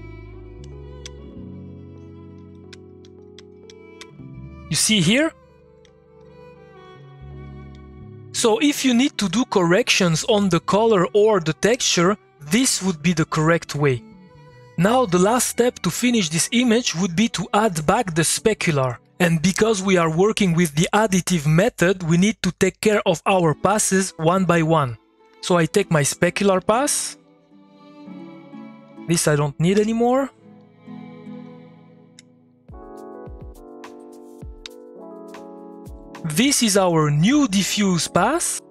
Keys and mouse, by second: 0.0-1.0 typing, 0.6 click, 2.1-8.2 typing, 25.2-26.5 drag, 26.5 middle click, 27.2 click, 30.6 click, 30.9 middle click, 31.3 click, 31.9 ctrl+click, 36.0-38.7 drag.